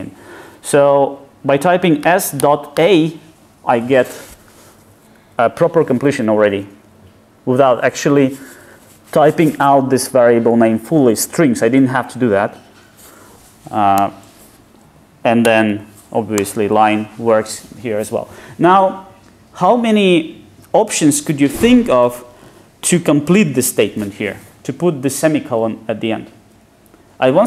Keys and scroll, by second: 14.1 Return, 15.5 ctrl+space.